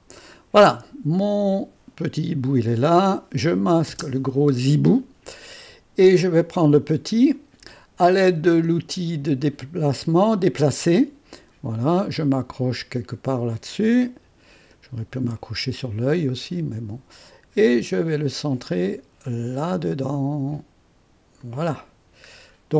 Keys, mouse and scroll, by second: 2.9 click, 3.9 space, 6.3 click, 10.4 click, 13.5 click, 14.7-15.8 scroll up 4, 15.4 right click, 16.3-19.1 right drag, 21.4 click, 22.5 scroll down 2.